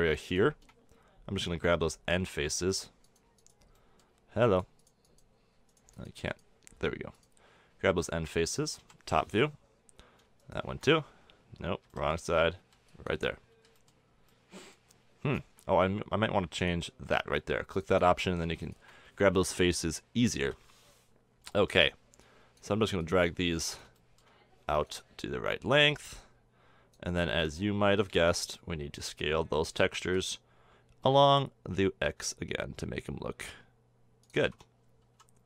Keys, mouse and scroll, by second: 2.1 middle drag, 9.0 click, 9.3 KP_7, 10.2 click, 10.9-12.3 drag, 12.3 b, 13.0 b, 14.0 b, 14.7-15.4 middle drag, 16.7-19.1 middle drag, 20.4-20.9 middle drag, 20.9 KP_7, 21.6-24.0 middle drag, 24.2-28.4 drag, 28.4 b, 30.5 s, 34.8 a, 34.9 Tab.